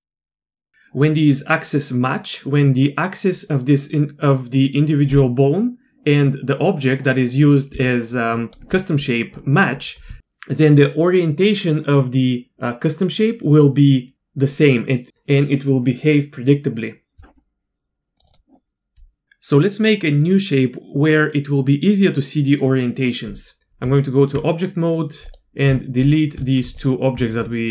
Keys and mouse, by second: 0.3 KP_Divide, 0.5 middle click, 7.7 d, 7.9 click, 8.5 d, 8.6 d, 9.2 d, 18.2 click, 23.8 Tab, 26.0 shift+click, 26.8 shift+click.